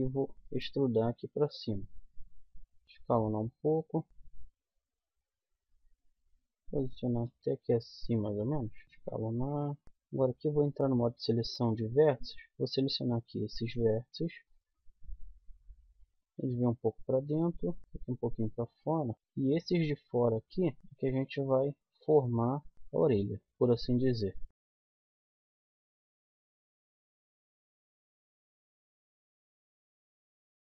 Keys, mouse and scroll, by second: 0.3 e, 1.1 click, 2.5 middle click, 2.6 click, 2.8 s, 4.1 KP_1, 4.3 g, 7.2 z, 8.6 s, 8.8 z, 9.4 middle click, 9.8-11.1 middle drag, 9.8 z, 11.2-15.9 middle drag, 12.2 click, 12.2 right click, 16.1 middle click, 18.5-20.5 middle drag, 20.6 middle click, 21.9 right click, 22.6 click, 23.1 right click, 23.4 click, 24.6 middle click, 25.2 middle click, 26.2-27.4 middle drag, 27.5-28.6 middle drag, 28.7 middle click, 29.6 right click, 30.1 click.